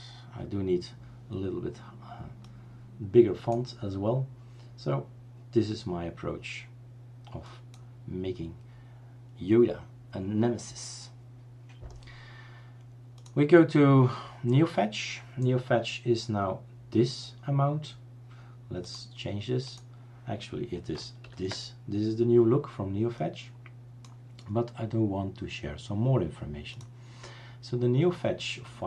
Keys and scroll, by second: 21.4 ctrl+alt+t.